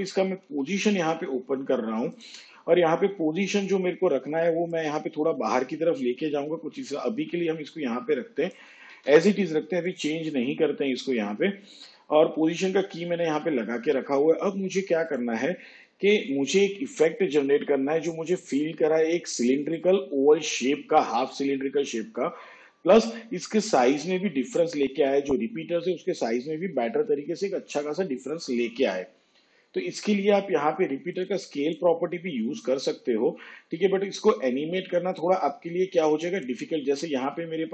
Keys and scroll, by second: 0.5 p, 8.9 ctrl+z.